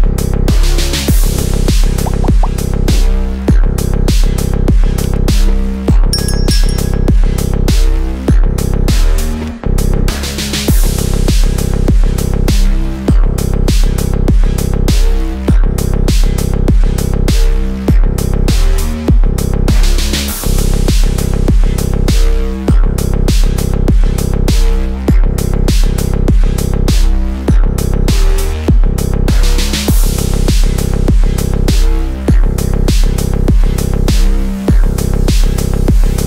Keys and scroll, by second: 14.6 c, 17.7 ctrl+q.